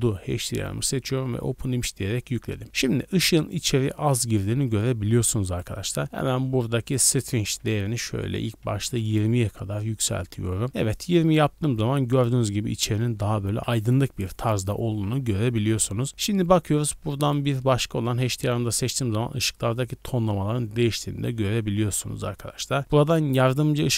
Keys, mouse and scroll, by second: 5.5 right click, 6.8-9.4 drag, 16.1 click.